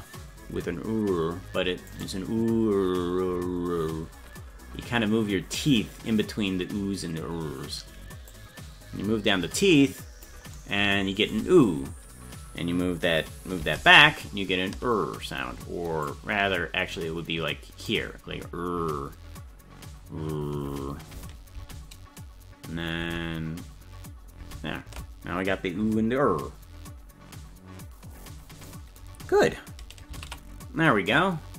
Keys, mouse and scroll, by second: 1.9 right click, 8.3-10.3 drag, 13.9 ctrl+z, 16.0-17.9 drag, 21.6 ctrl+z, 23.1 ctrl+z, 24.5 ctrl+z, 30.4 ctrl+s.